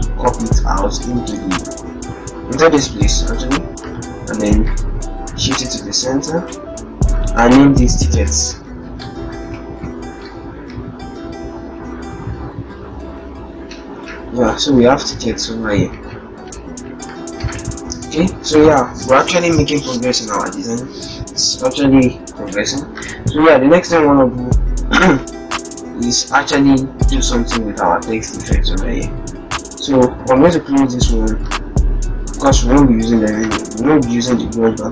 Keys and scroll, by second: 7.8 ctrl+shift+t, 9.7 ctrl+shift+Return, 11.6 shift+Up, 12.4 shift+Right, 13.1 shift+Right, 14.1 Right, 14.8 Right, 15.4 Right, 16.0 Right, 16.6 Right, 25.4 alt+Tab.